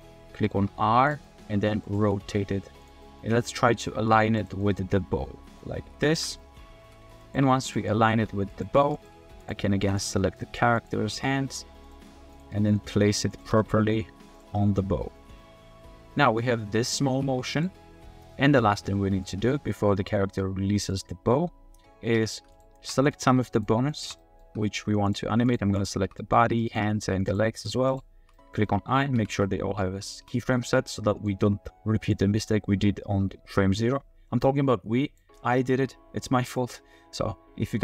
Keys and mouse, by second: 0.3 r, 0.5 r, 1.3 middle click, 1.6 g, 2.0 r, 2.2 r, 3.0 middle click, 3.9 r, 4.6-5.6 middle drag, 5.8 r, 6.4 shift+drag, 6.8-9.1 typing, 7.2 click, 7.9 click, 8.9 click, 10.3 click, 10.7 click, 11.1-13.6 typing, 12.5 click, 14.5-15.1 drag, 15.4-16.8 drag, 16.8 middle click, 17.1 r, 17.3 r, 19.2 middle click, 20.4-20.9 middle drag, 22.9 drag, 23.9 shift+click, 24.2 middle drag, 25.1 shift+click, 25.8 shift+click, 26.2 drag, 26.6 shift+drag, 27.2 shift+click, 27.9 shift+click, 28.3 drag, 29.2 i, 29.4-29.8 middle drag, 30.1 shift+middle drag, 31.2 middle click, 32.1-35.2 middle drag, 36.6-37.8 middle drag.